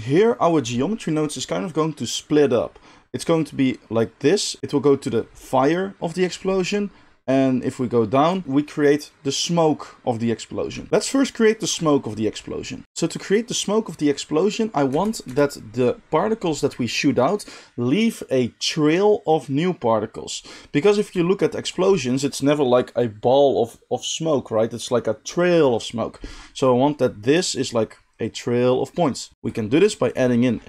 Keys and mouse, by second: 14.8 space, 15.2 space, 15.5-30.6 drag, 29.3 shift+a.